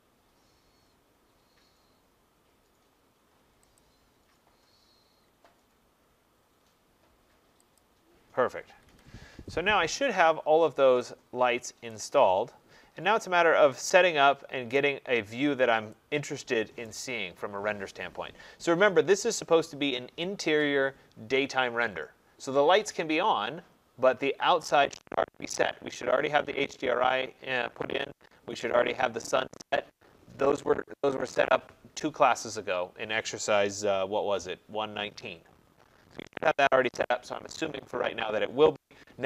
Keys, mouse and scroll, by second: 0.8-1.3 scroll, 3.8 click, 4.2-4.5 scroll, 5.2 scroll, 6.0 middle click, 6.1 middle click, 6.2 middle click, 7.8 click, 8.7 Escape, 8.9 Escape, 10.2 middle click, 10.2 middle click, 12.0 right click, 12.3 middle click, 12.4 middle click, 12.5 middle click, 13.2 middle click, 13.3 middle click, 14.7 right click.